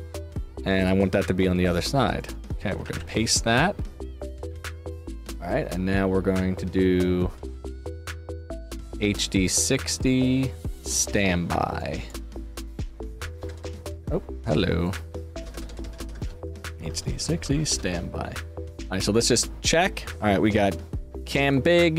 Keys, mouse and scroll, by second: 0.2-0.7 scroll down 2, 0.7 click, 2.1 click, 2.6 ctrl+v, 2.8 ctrl+v, 8.3 click, 10.7 click, 11.7 click, 12.4 click, 14.8 click, 16.6 shift+d, 17.4 shift+space, 17.5 shift+s, 18.6 click, 19.3 click, 21.3 click.